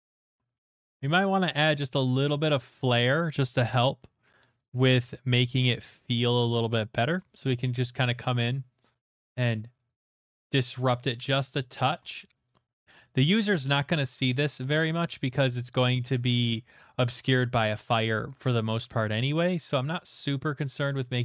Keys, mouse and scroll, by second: 0.2 click, 0.5 click, 0.7 click, 0.9 click, 4.5 click, 5.7 click, 6.8 click, 7.2 click, 7.6 click, 7.9 click, 8.3 click, 9.1 middle click, 9.3 click, 9.8 click, 10.1 click, 11.1 middle click, 11.4 click, 11.8 middle click, 12.1 click, 12.5 click, 13.1 click, 13.9 click, 14.5 middle click, 14.8 click, 15.1 click, 15.6 middle click, 15.9 click, 16.1 click, 16.3 click, 17.1 middle click, 17.9 click, 18.6 middle click, 19.9 click, 20.5 middle click.